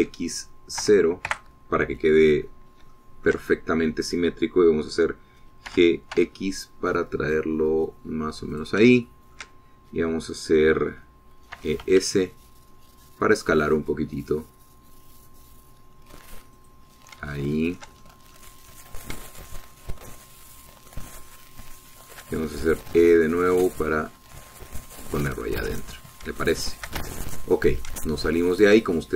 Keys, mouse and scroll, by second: 0.5 s, 1.1 x, 2.0 KP_0, 2.5 KP_Enter, 4.1 shift+click, 6.8 g, 7.3 x, 9.7 shift+click, 10.2 shift+middle click, 12.7 e, 13.0 s, 17.8 middle click, 18.5 shift+middle click, 19.2 shift+middle click, 19.5 shift+middle click, 19.6 shift+click, 19.8-23.5 middle drag, 24.0 click, 24.0 e, 26.1 click, 26.5-26.8 scroll down 1, 27.6 shift+middle click, 28.3 shift+Tab, 28.8 click, 28.8 scroll down 1, 29.1 click.